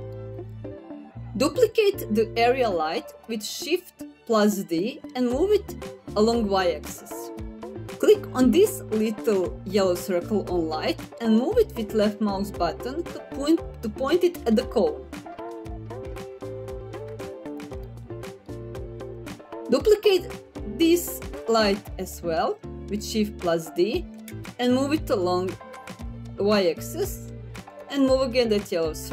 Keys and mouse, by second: 1.5 shift+d, 3.8 y, 6.6 click, 8.9 click, 12.7 middle click, 14.6 click, 15.9-16.5 middle drag, 21.0 shift+d, 22.2 y, 26.6 click, 29.0-29.1 middle drag.